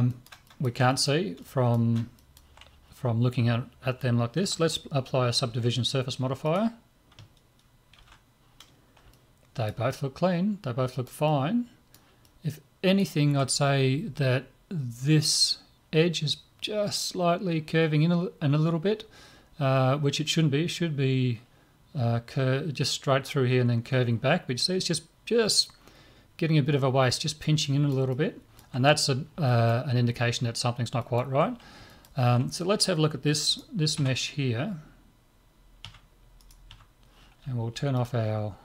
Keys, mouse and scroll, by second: 5.5 ctrl+5, 6.5 right click, 8.0 ctrl+5, 9.1-14.1 middle drag, 26.8-33.5 middle drag, 33.5 right click, 34.0 Tab, 35.9 Tab, 36.4 right click, 36.7 Tab, 38.0-38.6 drag.